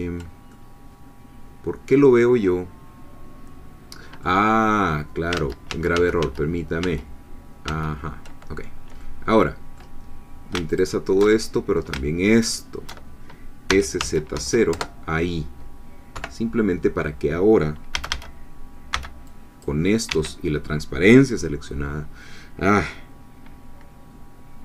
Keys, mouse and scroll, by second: 0.5-4.4 ctrl+drag, 5.4 ctrl+z, 9.0-10.5 middle drag, 10.8 alt+shift+click, 11.3 alt+shift+middle click, 12.3 alt+shift+click, 13.7 s, 14.0 z, 14.3 0, 14.7 Return, 16.1 3, 17.9 a, 18.9 c, 19.3 click, 20.1 Escape.